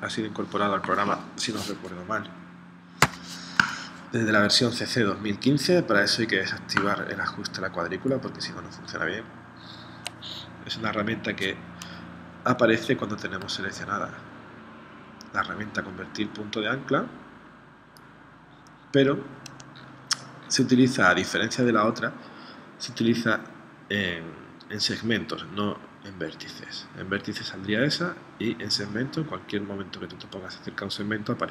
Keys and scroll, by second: 3.1 v.